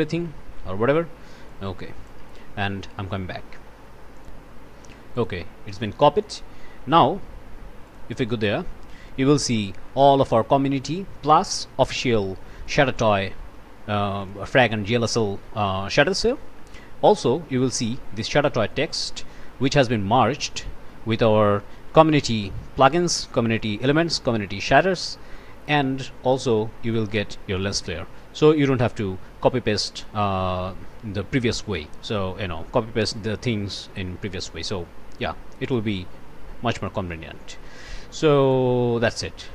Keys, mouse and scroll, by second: 1.5 click, 4.2 click, 5.2 click, 6.4 scroll down 2, 7.9 click, 9.0 click, 9.5-10.2 scroll up 2, 12.7-13.3 scroll down 2, 14.2 click, 16.2 click, 17.6 click, 19.3 scroll up 2, 19.7 scroll down 2, 20.2-21.1 scroll up 3, 21.5-22.0 scroll up 1, 22.4-23.8 scroll up 4, 24.3 scroll down 2, 25.4 scroll down 2, 25.6 scroll up 1, 26.4-27.2 scroll down 1, 28.8-29.9 drag, 35.6 click, 36.9 click, 38.4 click.